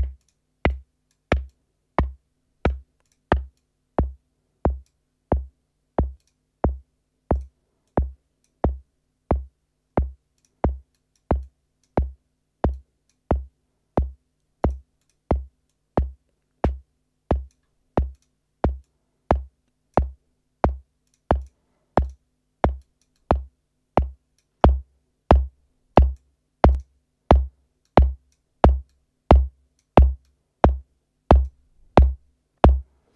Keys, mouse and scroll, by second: 0.1 click, 0.6-1.2 drag, 1.4-2.8 drag, 3.0 click, 3.5-5.0 drag, 6.1 click, 7.3 click, 7.8 click, 10.3 click, 10.9 click, 11.3 click, 12.7 click, 14.6 click, 14.9 click, 15.6-17.6 drag, 18.1 click, 18.8-20.1 drag, 21.0 click, 21.3 click, 22.0 click, 22.7-24.5 drag, 25.9-26.3 drag, 26.6 click, 27.8-28.4 drag, 28.8 click, 30.2-31.6 drag, 31.9-33.1 drag.